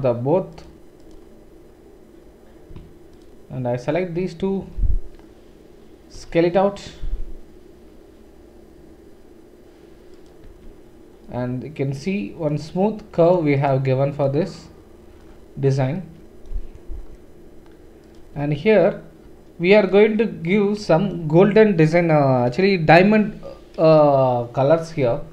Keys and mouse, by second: 4.2-13.3 middle drag, 6.1 s, 10.5 Tab, 13.3-19.8 right drag, 14.2 click, 14.2 middle click, 18.0 click, 18.0 middle click, 18.3 Tab, 18.3 Tab, 19.8 click.